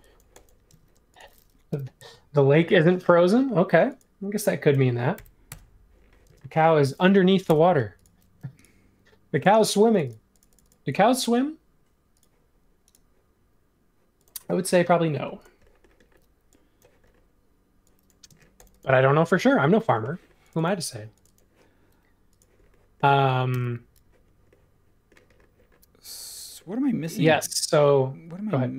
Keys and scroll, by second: 0.7 space, 1.7 m, 4.7 x, 5.5 Return, 6.2 space, 7.4 BackSpace, 16.1 p, 18.3 space, 23.5 super+s.